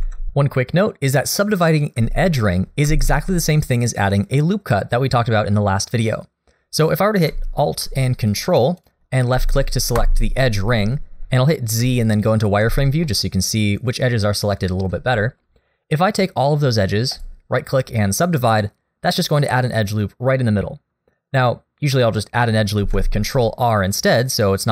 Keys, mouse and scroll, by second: 2.9 ctrl+z, 8.3 ctrl+alt+right click, 8.8 ctrl+alt+click, 11.8 z, 13.1 middle click, 14.5 middle click, 15.2 shift+middle click, 15.4-17.2 scroll down 1, 17.2 right click, 22.8 ctrl+z, 24.4 z.